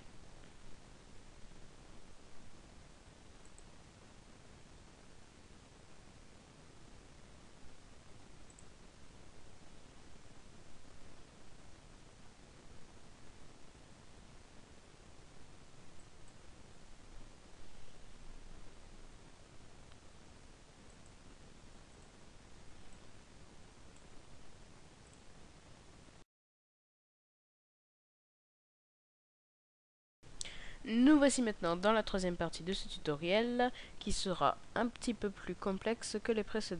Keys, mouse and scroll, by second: 3.7 click, 9.1 click, 21.8 click, 30.1 click.